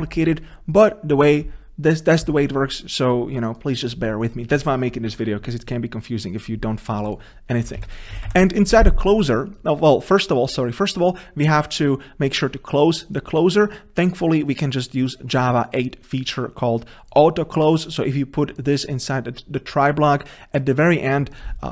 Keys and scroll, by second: 8.2 Delete.